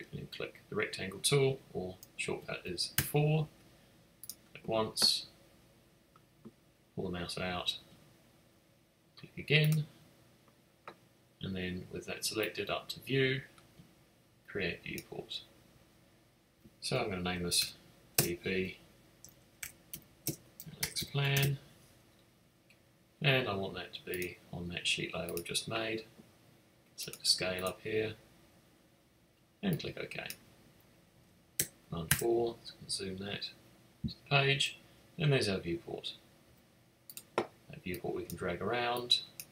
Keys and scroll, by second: 2.9 4, 17.2-18.1 typing, 19.5-21.8 typing, 32.0 super+4, 36.4 x.